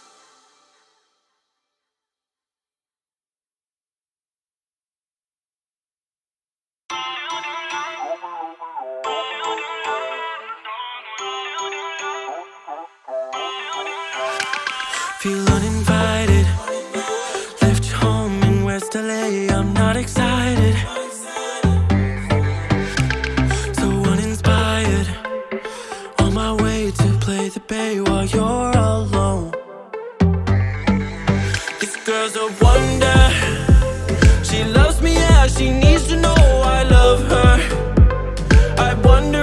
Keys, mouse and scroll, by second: 1.6 Down, 4.0 scroll up 1, 4.1-5.0 scroll down 5, 5.0-5.9 middle drag, 5.9 click, 6.8 click, 7.1-8.1 drag, 9.0 click, 9.6 click, 10.4 click, 11.5 click, 12.6 click, 14.3 drag, 15.0 click, 16.1-17.3 drag, 19.1 x, 19.2 ctrl+a, 20.5 BackSpace, 20.6 BackSpace, 23.1 l, 23.6 Down, 25.5 scroll up 2, 26.8 click, 28.3 click, 29.1-30.4 middle drag, 30.4 click, 32.6 middle click, 33.4 click, 35.1 g, 36.7-37.2 middle drag, 37.2 scroll down 1, 37.3 scroll up 2, 37.6-38.2 scroll down 4, 38.2 middle click, 38.6 click.